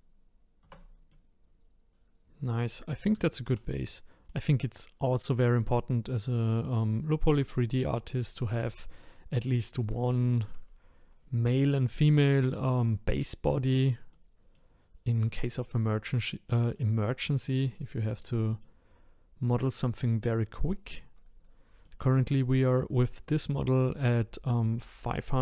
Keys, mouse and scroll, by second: 0.6 Tab, 1.1-2.8 middle drag, 2.8-3.2 scroll down 1, 3.2-5.6 shift+middle drag, 5.6 click, 6.3-8.5 scroll up 4, 9.4-10.1 scroll down 2, 10.1-13.1 shift+middle drag, 14.1-22.7 middle drag, 22.7 click, 24.0-25.4 middle drag.